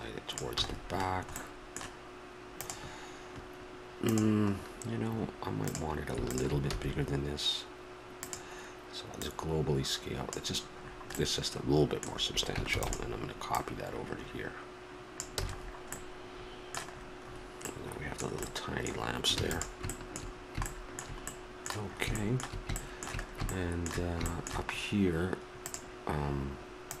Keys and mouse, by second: 0.6 a, 0.7 middle click, 1.1 click, 1.4-2.7 middle drag, 5.6 click, 6.5 middle click, 6.7-8.2 drag, 6.7 s, 9.2-10.9 drag, 10.9-13.5 middle drag, 12.7 shift+d, 13.5-15.4 drag, 15.4 a, 19.4 ctrl+s, 25.6-27.0 drag.